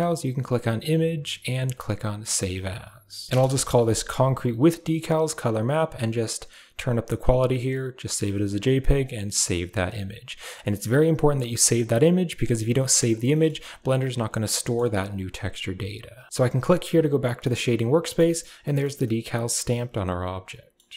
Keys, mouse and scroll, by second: 0.7-3.3 drag, 3.3 BackSpace, 6.8 click, 8.8 click, 11.5 click, 13.2 middle click, 14.5 middle click, 17.3-18.1 middle drag, 18.9-20.7 middle drag.